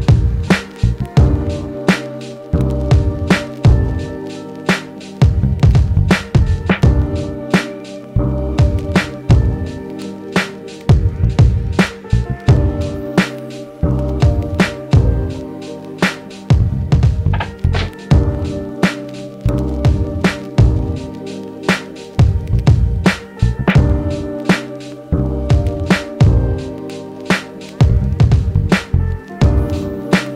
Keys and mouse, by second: 9.2 f, 9.6 middle click, 10.3-13.4 shift+drag, 12.0 g, 13.4-14.0 middle drag, 14.0-29.4 drag.